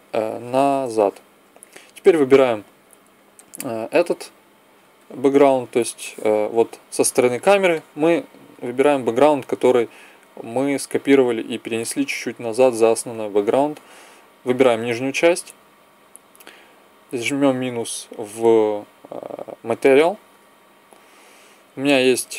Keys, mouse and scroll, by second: 2.2 right click, 2.9-3.9 middle drag, 3.9-5.0 drag, 5.0 middle click, 13.9-17.6 middle drag, 17.6-22.3 drag.